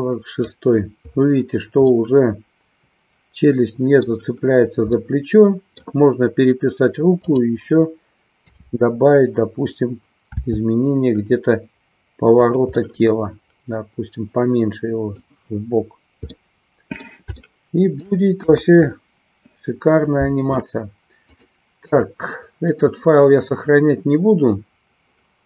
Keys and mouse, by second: 1.8-4.1 middle drag, 5.0-6.0 middle drag, 7.2-8.3 drag, 8.5 KP_7, 10.5 r, 12.5 click, 12.9-15.2 middle drag, 16.3 middle click, 17.5 shift+middle click, 18.5 KP_1, 21.3 click.